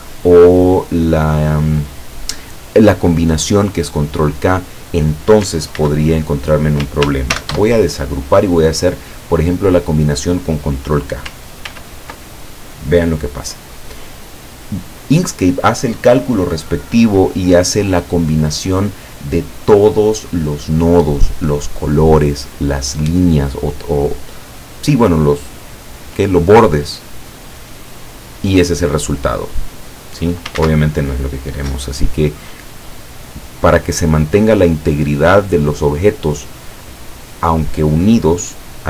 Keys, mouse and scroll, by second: 4.4 click, 5.9 ctrl+z, 7.4 ctrl+shift+g, 11.7 ctrl+k, 30.7 ctrl+z, 32.7-33.9 drag.